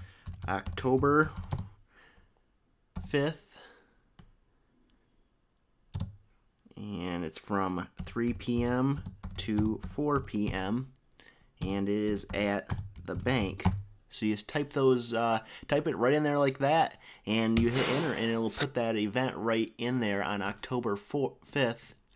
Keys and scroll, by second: 0.0-1.9 typing, 3.0 5, 7.8-13.9 typing.